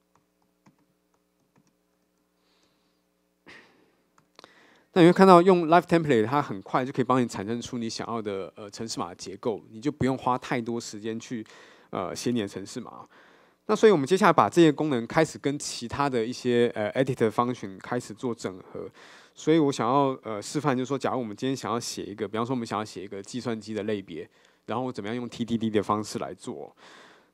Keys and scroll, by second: 4.3 Return.